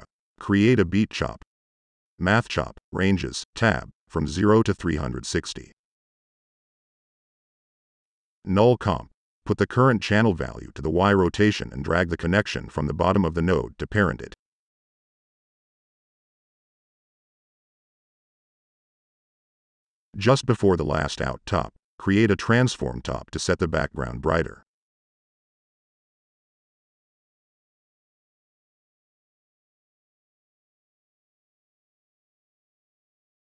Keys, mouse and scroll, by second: 0.1 click, 0.9 drag, 1.2 click, 1.9-3.1 typing, 2.9 drag, 3.2 click, 4.2 click, 5.9 click, 6.2 click, 6.6 click, 6.9 Tab, 7.3 click, 8.0-8.8 typing, 9.2 click, 11.0 click, 12.5-13.0 drag, 16.6-17.2 drag, 17.3-18.4 drag, 20.1 click, 21.0-21.9 typing, 22.1 click, 22.3 click, 23.0 click, 27.4 click, 29.3 click, 30.1 click, 31.1 click.